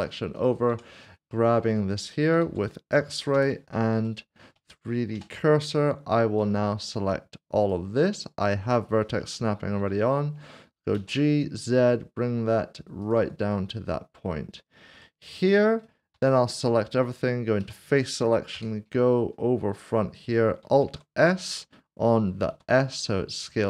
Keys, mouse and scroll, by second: 0.3 double click, 0.7 Tab, 1.3 Tab, 1.5 middle click, 3.3 typing, 4.1 shift+middle click, 5.1 typing, 6.4 1, 10.9 typing, 13.0 ctrl+click, 13.5 middle click, 15.0 shift+middle click, 16.2 a, 16.9 middle click, 18.5 typing, 22.8 typing.